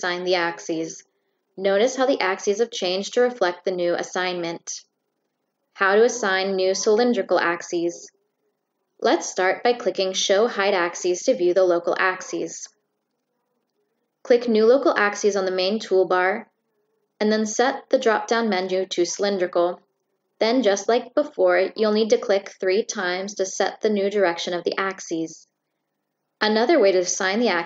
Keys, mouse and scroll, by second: 5.3 click, 7.4 click, 8.3 click, 8.9 right click, 10.1 click, 10.6 Escape, 13.1 click, 14.2 click, 18.7 click, 19.7 click, 20.1 click, 21.8 click, 23.1 click, 26.2 click, 27.2 click.